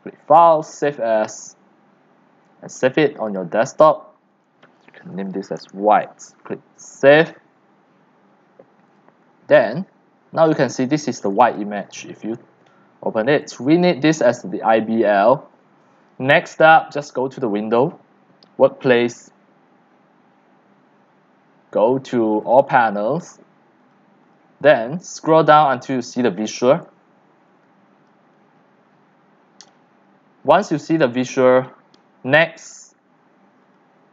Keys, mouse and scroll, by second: 0.5-4.8 drag, 4.8-5.4 typing, 7.2 click, 9.4-10.1 drag, 11.3 click, 13.4 click, 13.8 click, 15.8-16.6 drag, 17.0 click, 17.7 click, 22.4 click, 23.8 click, 24.2 click, 25.8 click, 26.5 click, 26.7 click, 28.1-28.8 drag, 29.5 click, 30.7 click, 33.6 click.